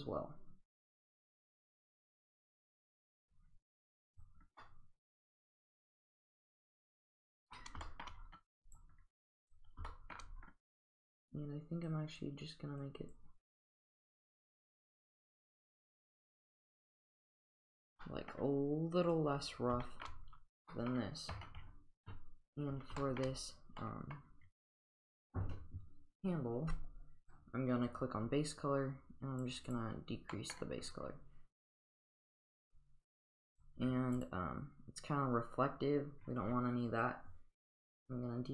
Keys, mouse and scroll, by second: 1.2 click, 2.5-3.4 drag, 3.6 click, 4.2 click, 4.6-7.6 middle drag, 7.9 shift+middle click, 8.7 click, 9.5 click, 9.9 shift+middle drag, 11.9-12.2 drag, 12.8 click, 15.7-17.4 drag, 17.6 click, 18.1 middle drag, 19.1 click, 19.9 shift+middle click, 20.7 middle click, 22.5 click, 23.0 shift+middle drag, 23.8-24.2 middle drag, 27.3 click, 29.7 click, 30.4 middle click, 31.7 click, 33.6 click, 34.2 click, 38.0-38.5 drag.